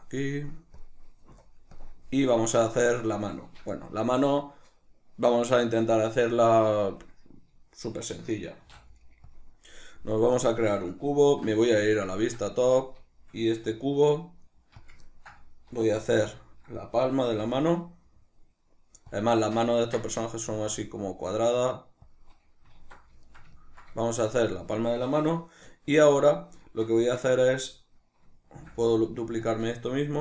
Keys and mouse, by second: 0.8 click, 1.7 click, 8.7 shift+a, 11.3 alt+q, 11.8-14.9 shift+middle drag, 12.6 Tab, 13.7 s, 14.9 click, 15.1-19.2 ctrl+middle drag, 16.0 alt+q, 17.1 s, 19.2 click, 19.4-22.2 shift+middle drag, 20.4 s, 22.2 click, 22.8 alt+q, 23.2-28.5 ctrl+shift+middle drag, 27.0 Tab, 28.5 shift+d, 29.5 click.